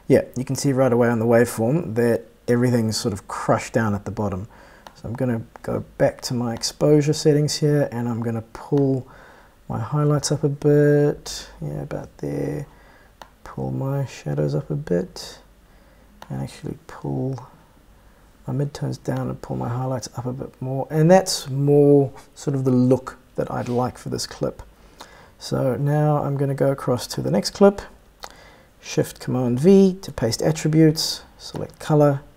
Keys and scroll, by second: 30.0 shift+super+v.